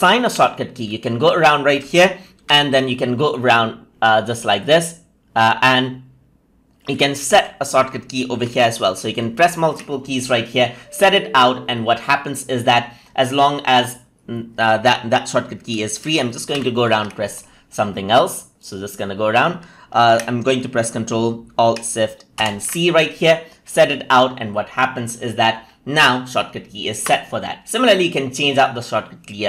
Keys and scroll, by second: 2.3 ctrl+shift+g, 8.7 ctrl+a, 9.0 ctrl+shift+f, 16.4 ctrl+shift+h, 22.2 ctrl+alt+shift+c.